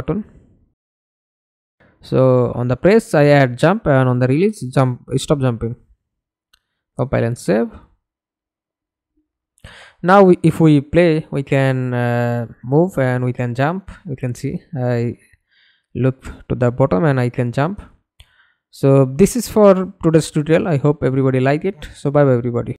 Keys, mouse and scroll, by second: 1.9-3.4 typing, 3.6 Return, 7.5 middle click, 8.3 F11, 8.8 alt+p, 10.5 w, 11.2 w, 12.0 space, 13.2 space, 15.4 space, 16.5 space, 17.7 space, 18.8 space, 19.9 space, 22.5 alt+F9.